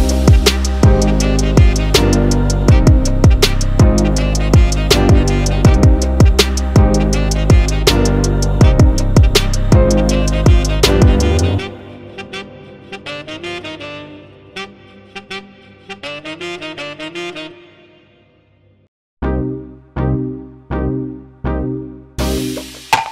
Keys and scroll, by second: 0.2-1.0 typing, 1.0 super+=, 3.0 Return, 3.2 alt+BackSpace, 3.3 super+d, 3.5-5.1 typing, 6.2 v, 6.6 |, 7.0 shift+BackSpace, 7.2 super+d, 7.5 shift+BackSpace, 7.6 super+d, 8.8 b, 9.9-11.3 typing, 13.4 Return, 13.5 m, 13.8 b, 14.1 super+d, 14.9 x, 15.1 x, 16.7 x, 17.2 super+0, 17.2 v, 17.3 super+-, 17.5 super+-, 17.6 super+1, 20.1-23.1 typing, 22.6 super+z, 22.6 super+=.